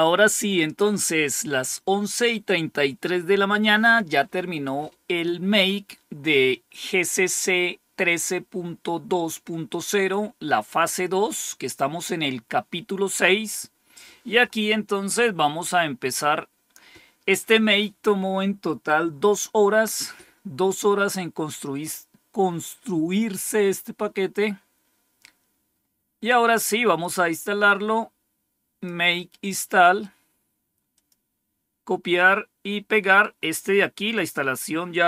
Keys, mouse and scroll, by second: 13.4 click, 15.4 scroll down 2, 16.2 scroll down 2, 19.6-20.4 scroll down 3, 21.3-22.0 scroll down 2, 23.4-25.4 scroll down 3, 26.9-28.8 drag, 29.7 right click, 30.8 click, 32.9 right click, 34.0 click.